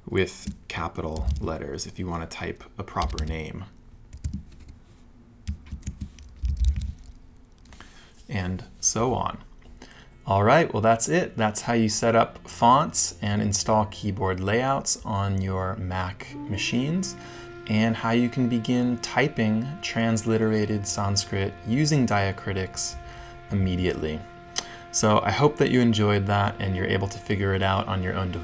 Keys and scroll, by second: 0.9-1.7 typing, 3.0 Return, 5.5 alt+shift+a, 6.2-7.2 typing.